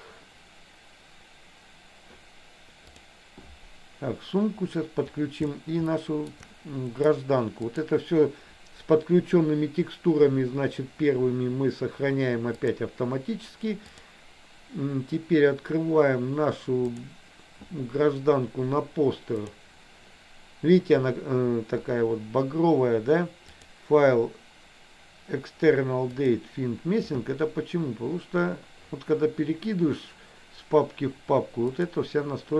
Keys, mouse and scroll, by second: 6.1 shift+middle click, 7.7-13.0 drag, 14.1-17.3 drag, 23.6-26.6 drag.